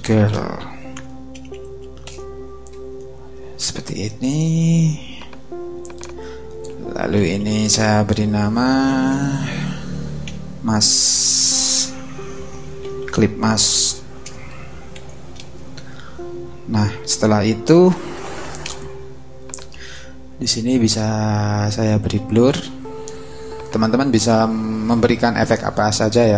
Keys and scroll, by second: 0.0-2.0 typing, 6.9-10.2 typing, 11.3 Left, 12.2-14.0 typing, 14.3 Right, 15.3 Return.